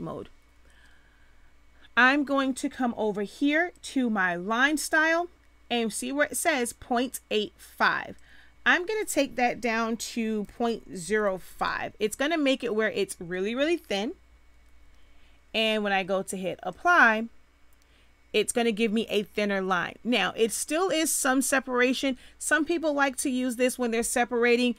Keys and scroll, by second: 10.4 ., 11.0 0, 11.2 5, 11.5 Return.